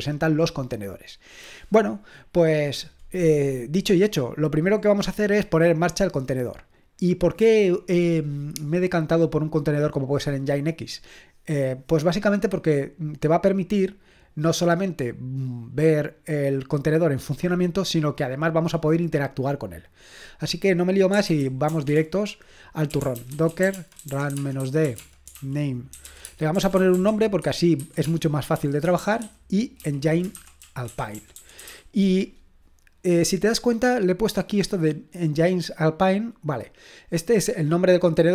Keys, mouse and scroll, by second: 1.1-2.8 scroll down 1, 2.8-4.8 scroll down 1, 4.8-6.9 scroll down 1, 6.9 scroll down 1, 7.1-21.1 drag, 20.9-31.7 typing, 37.2-38.3 drag.